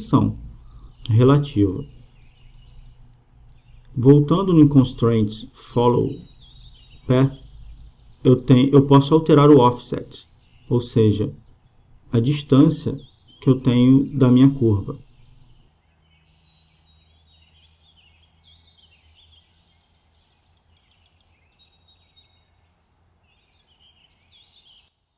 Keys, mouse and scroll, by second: 5.7-7.4 drag, 9.0-10.7 drag, 12.9-14.8 drag, 17.7-19.6 drag, 21.6-23.4 drag.